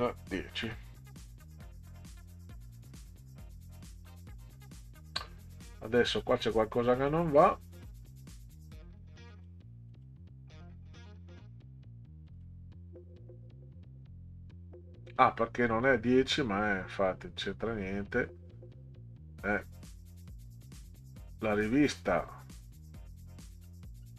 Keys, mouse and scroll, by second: 0.6 0, 6.2 scroll down 2, 7.2 scroll down 2, 9.3 click, 9.9 click, 12.3 click, 17.1 scroll up 2, 19.6 scroll down 2, 20.4 scroll up 2, 23.6-24.1 scroll up 6.